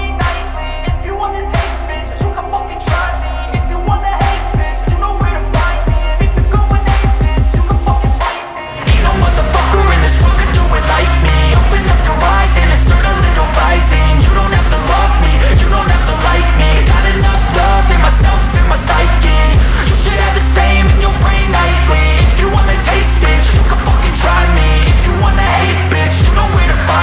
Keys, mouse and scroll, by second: 1.0 space, 1.2 click, 1.5 space, 1.8 click, 3.9 space, 4.2 click, 4.4 space, 4.5 click, 5.8 ctrl+0, 7.7 ctrl+e, 9.7 click, 10.5 z, 10.8 click, 12.8 ctrl+shift+a, 17.6 click.